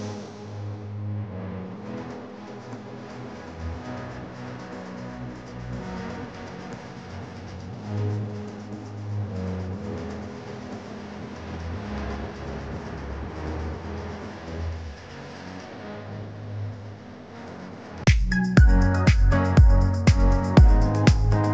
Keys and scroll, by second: 0.3 space, 2.0 space, 3.4 space, 8.0 space, 10.1 space, 11.1 space, 14.3 space, 15.7 ▭, 16.2 space.